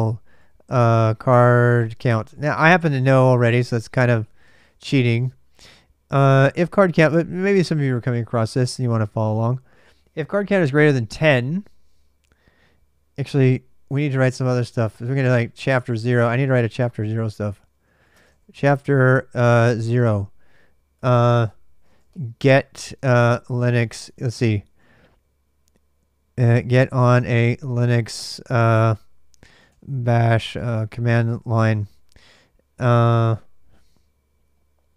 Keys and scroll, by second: 0.0-4.7 typing, 13.0 alt+Tab, 14.4 ctrl+[, 14.6-20.1 typing, 15.6 Return, 20.7 Return, 20.8 Return, 21.4-24.9 typing, 26.1-27.9 typing, 28.9-31.6 typing, 34.8-34.9 typing.